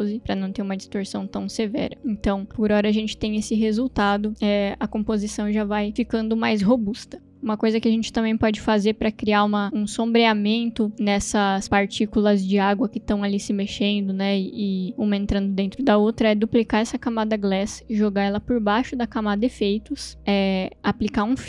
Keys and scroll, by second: 0.0-0.3 typing, 1.9 space, 17.0 ctrl+d, 21.3 space.